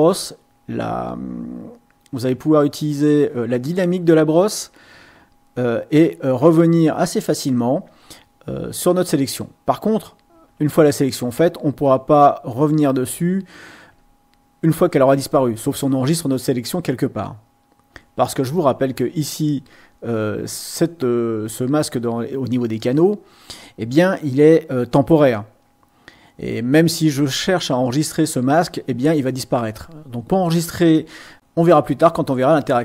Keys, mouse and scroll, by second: 1.1-3.3 drag, 4.3 click, 5.6-7.9 drag, 10.3 x, 10.9 click, 11.9 click, 12.7 click, 13.9 x, 18.9 click, 31.3 click.